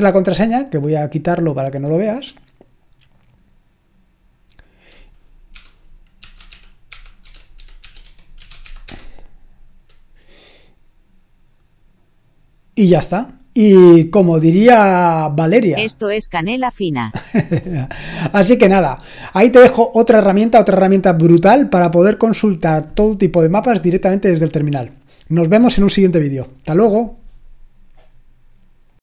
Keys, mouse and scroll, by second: 1.8 click, 3.3 click.